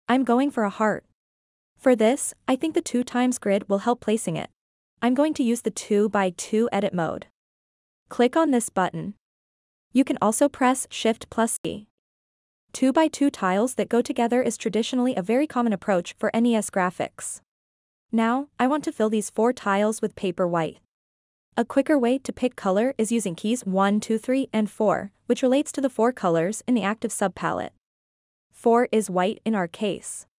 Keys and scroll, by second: 2.7-3.6 typing, 23.4-26.3 typing.